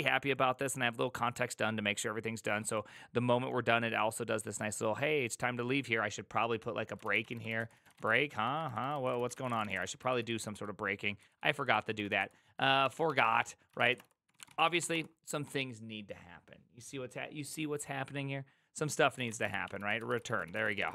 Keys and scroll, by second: 6.9-15.3 typing, 19.1-20.9 typing.